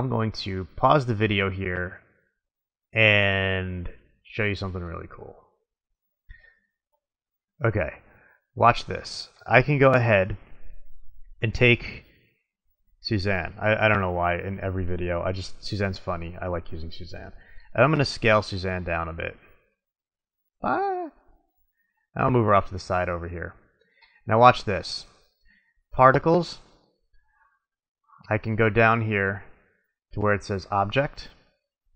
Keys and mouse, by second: 5.8-12.4 middle drag, 12.4-15.8 drag, 15.8 middle click, 15.9 click, 16.0 middle click, 17.8 s, 22.6-25.3 drag, 25.5-25.9 middle drag, 25.9-27.5 drag, 27.9-31.3 middle drag, 31.3-31.9 drag.